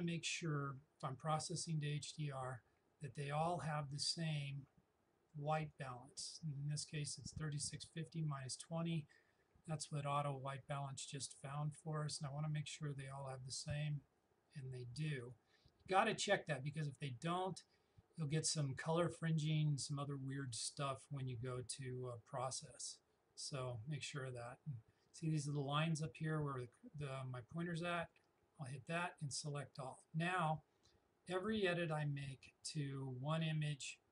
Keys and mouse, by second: 3.9 click, 12.1 click, 20.5-25.1 drag, 28.0 click.